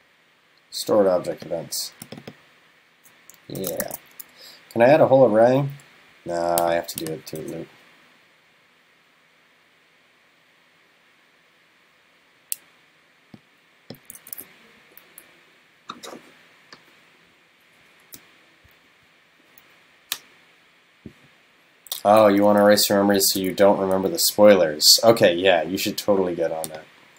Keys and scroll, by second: 3.9 super+s, 14.2 super+c, 23.4 super+c.